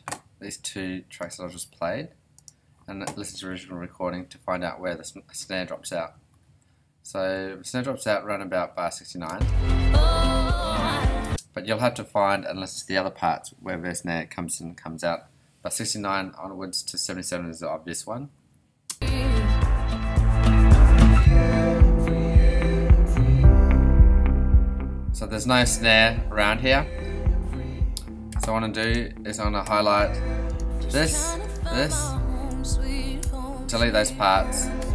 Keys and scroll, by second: 6.1 ,, 7.5 •, 9.3 space, 11.2 space, 18.1 ,, 18.9 space, 33.2 shift+BackSpace.